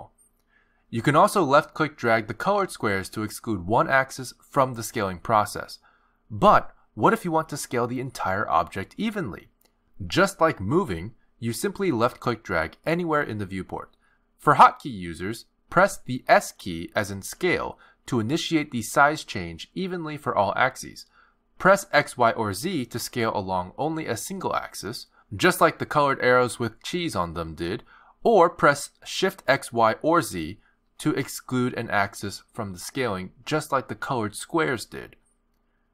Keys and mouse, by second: 0.1 click, 3.8 click, 6.3 click, 9.4 click, 12.6 click, 17.1 s.